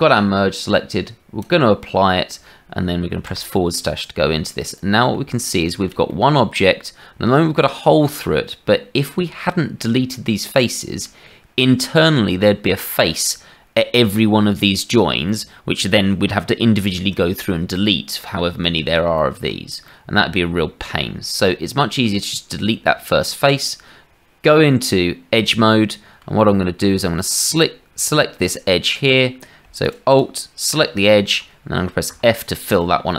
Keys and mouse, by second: 1.4 click, 5.4 shift+middle click, 6.1-9.1 middle drag, 10.5 middle click, 15.4 middle click, 17.7 middle click, 19.8 middle click, 20.3 shift+middle click, 21.4 middle click, 22.8 Tab, 25.6 right click, 26.3 shift+middle click, 27.5-29.6 shift+middle drag, 30.0 alt+click, 32.1 f, 32.7 middle click.